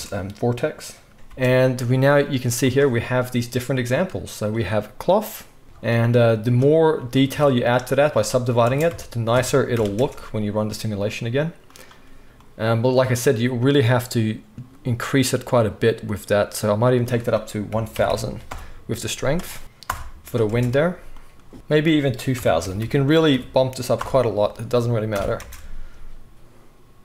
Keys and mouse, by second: 1.2 space, 2.3 middle click, 2.6 click, 2.7-5.2 middle drag, 5.2 click, 5.3-6.4 middle drag, 5.6 space, 6.4 click, 6.5-7.6 middle drag, 7.2 Tab, 7.6-8.8 right drag, 8.6 space, 8.8-11.7 drag, 9.0 Tab, 9.7 shift+Left, 9.9 space, 11.7 middle click, 11.8-16.9 drag, 16.9-20.5 middle drag, 18.0 0, 19.6 0, 20.4 space, 21.5 KP_1, 21.8 middle click, 22.7 0, 25.1 shift+Left, 25.4 space.